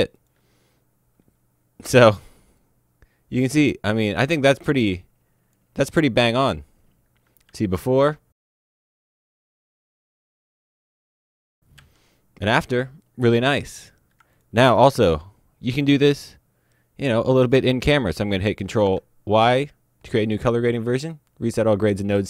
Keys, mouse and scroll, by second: 1.5 click, 2.6 click, 16.0 ctrl+Num_Lock, 20.4 right click, 21.0 click.